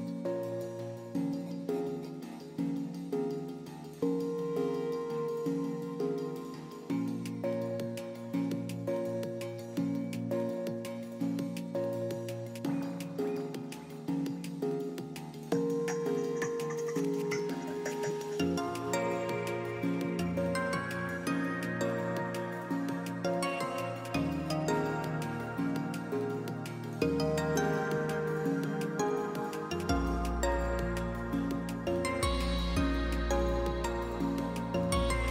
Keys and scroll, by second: 7.6 Delete, 9.2 shift+r, 25.6 f.